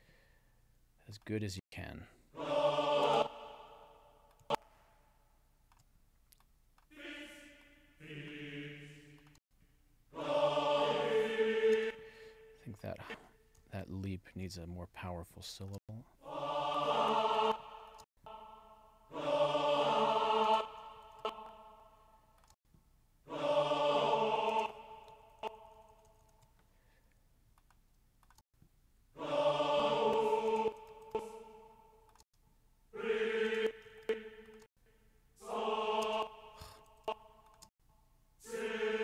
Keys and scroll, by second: 1.6 space, 3.1 space, 9.4 space, 11.7 space, 14.1 alt+Down, 15.7 space, 17.3 space, 20.5 space, 21.1 alt+Down, 22.6 space, 24.5 space, 25.2 alt+Up, 28.4 space, 30.5 space, 30.9 alt+Up, 32.2 space, 33.9 alt+Up, 34.7 space, 36.1 space, 36.9 alt+Up, 37.7 space.